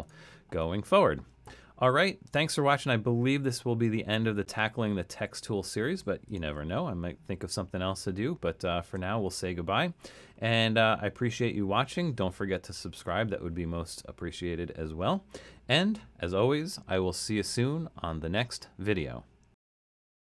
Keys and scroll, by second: 6.7 super+-, 7.3 super+-, 8.8 super+-.